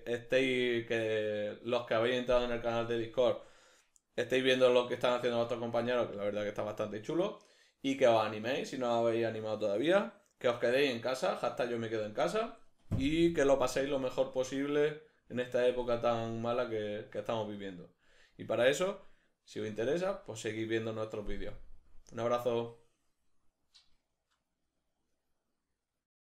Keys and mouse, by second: 25.8 middle click.